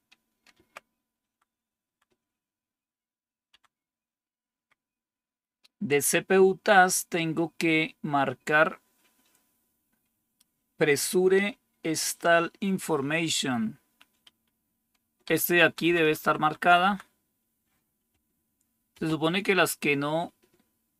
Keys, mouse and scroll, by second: 1.1 Down, 1.7 Down, 3.4 Down, 4.5 Up, 15.1 Down, 15.6 Down, 15.7 Down, 15.9 Down, 16.1 Down, 16.5 Down, 16.8 Down, 18.8 space.